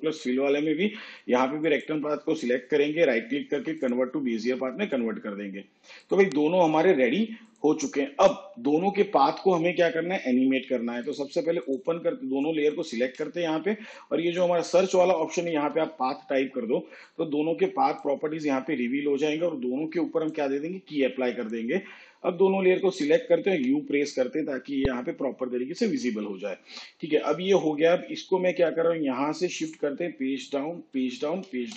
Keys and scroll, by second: 14.9-15.8 typing, 23.5 u, 30.0 shift+Page_Down.